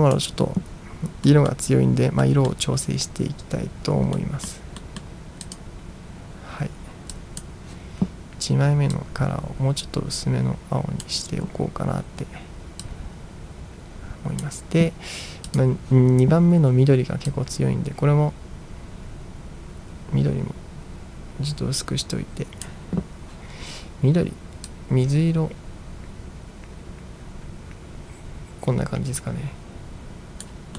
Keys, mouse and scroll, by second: 1.3 middle drag, 2.3 middle drag, 4.2-4.5 middle drag, 4.9 middle drag, 5.5 click, 7.2 click, 9.0-11.1 drag, 12.9-14.5 drag, 15.5 click, 17.4-22.7 drag, 24.8-30.5 drag.